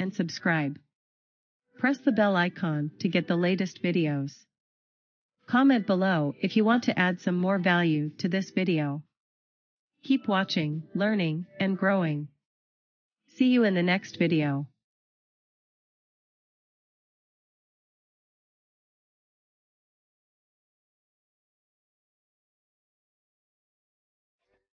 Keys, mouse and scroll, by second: 0.5 click.